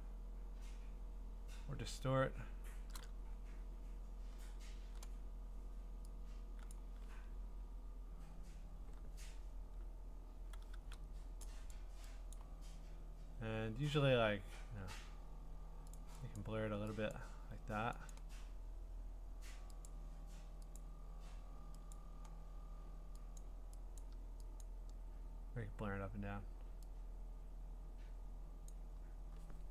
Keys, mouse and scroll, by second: 6.7 click, 11.7 click, 12.3 click, 16.0 click, 16.5 click, 17.1 click, 18.1 click, 19.9 click, 20.8 click, 21.9 click, 23.4 click, 24.0 click, 24.6 click, 28.7 click.